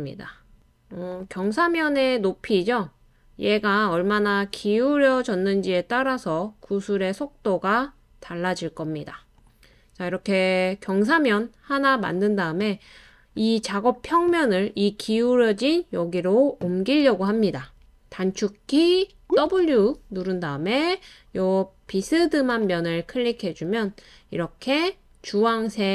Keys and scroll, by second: 10.0-11.9 typing, 13.1-14.5 typing, 19.5 typing, 24.2 typing.